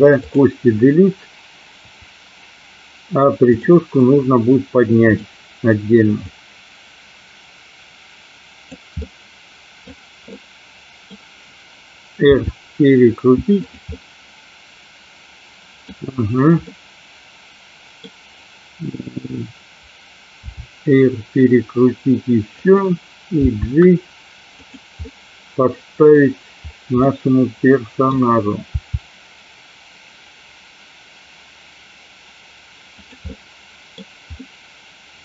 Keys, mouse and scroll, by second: 2.0 Delete, 3.6 click, 5.1 click, 6.3-8.7 drag, 9.1 middle click, 10.3 scroll up 1, 10.5-11.2 middle drag, 12.3 r, 13.7 click, 14.0-15.8 middle drag, 16.8-18.1 middle drag, 20.5 r, 22.6 click, 23.6 g, 24.7 click, 25.1-26.2 middle drag, 27.1 middle click, 28.8 g, 33.1 click, 33.3 middle click, 34.5 scroll up 1, 34.6-35.2 middle drag.